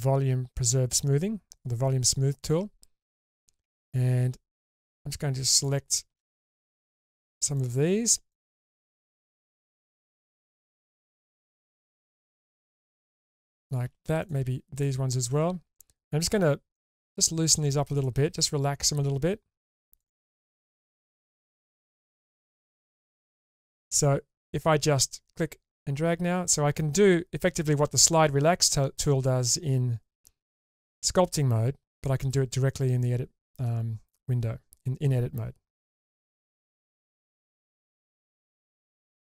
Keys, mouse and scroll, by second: 3.6 3, 4.5 click, 5.5 ctrl+shift+click, 7.5 shift+click, 8.3 ctrl+shift+click, 10.0 shift+click, 10.4 shift+click, 11.4 shift+click, 12.5 ctrl+shift+click, 14.2 shift+drag, 14.7 ctrl+shift+click, 15.4 scroll down 2, 15.7-16.5 middle drag, 16.7 shift+middle click, 17.5 shift+click, 17.9 shift+click, 20.0 shift+click, 20.3 shift+click, 21.0 shift+click, 22.2 shift+click, 24.1 shift+click, 25.4 click, 29.7 drag.